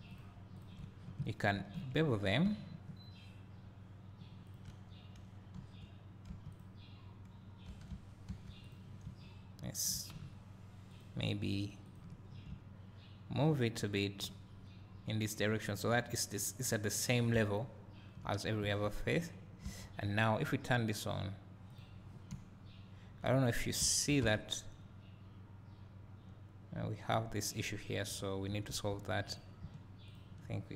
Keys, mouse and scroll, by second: 0.2 alt+shift+click, 1.6 ctrl+b, 4.5 shift+click, 6.3 1, 6.6 click, 7.7 2, 7.9 1, 8.3 2, 8.7 click, 9.4 `, 11.0 ctrl+click, 12.0 ctrl+click, 12.3 scroll up 2, 15.4-17.3 drag, 17.3 scroll down 2, 17.3-21.1 drag, 17.7 `, 18.6 2, 23.1 `, 23.4-23.8 scroll up 1, 24.8-25.3 scroll down 1, 28.8 1, 29.4 click, 30.1 shift+click.